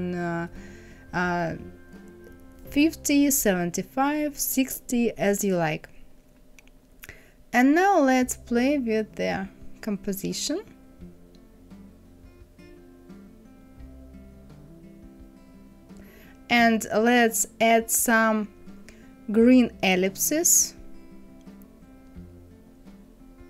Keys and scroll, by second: 0.8 KP_5, 1.1 KP_0, 1.2 Return.